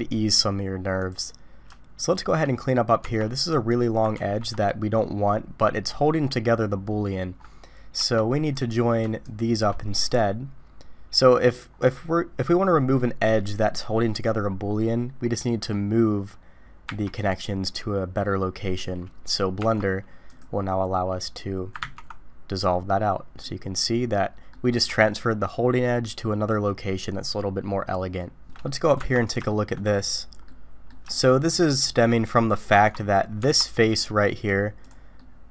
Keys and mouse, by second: 2.0 shift+click, 3.0 Tab, 3.7 click, 4.2 ctrl+x, 8.0 Tab, 9.2 shift+click, 16.9 j, 19.6 Tab, 20.3 click, 21.9 ctrl+x, 23.4-24.5 middle drag, 28.6 middle click, 29.0 Tab, 29.5 shift+middle drag, 30.4 middle click, 31.1-31.5 shift+middle drag, 32.7 Tab, 33.4 Tab, 34.8 middle click, 35.2 middle click.